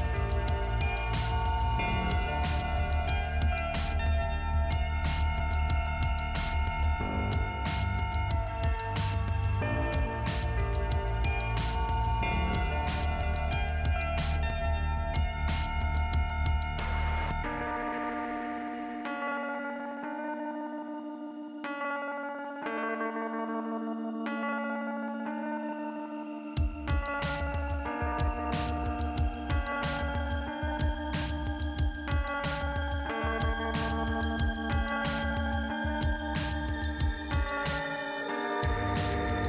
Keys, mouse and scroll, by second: 0.0 scroll down 2, 0.6-1.6 scroll up 1, 1.6 scroll up 2, 4.7 click, 6.8 click, 9.3 click, 10.0 click, 11.1 click, 13.8 click, 14.6 click, 14.7 click, 20.3 click, 20.8 click, 21.8 click, 24.4 click, 26.2 click, 27.3 click, 28.5 click, 31.5 click, 31.6 click, 31.9 click, 33.1 click, 34.5 click, 35.5 click, 36.9 click, 39.1 click.